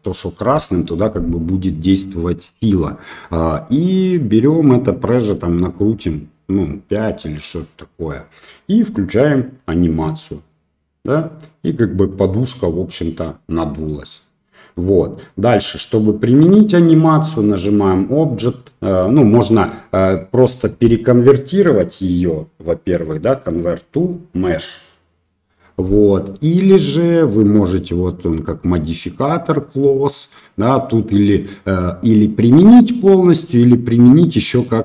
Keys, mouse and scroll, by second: 4.8-7.2 drag, 12.3-13.2 middle drag, 13.7-14.7 middle drag, 17.6-19.0 drag, 21.0-23.4 drag, 23.4-25.5 right drag, 27.8 click, 30.3-34.8 drag.